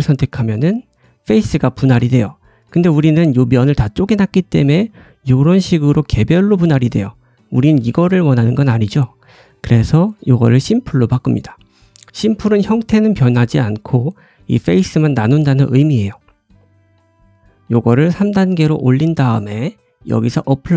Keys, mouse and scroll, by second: 1.1-2.1 shift+middle drag, 1.1 scroll up 1, 2.1 click, 2.1-11.3 right drag, 2.3 scroll up 2, 11.3 middle click, 11.3 click, 11.4 right click, 17.9 click, 17.9-20.7 middle drag.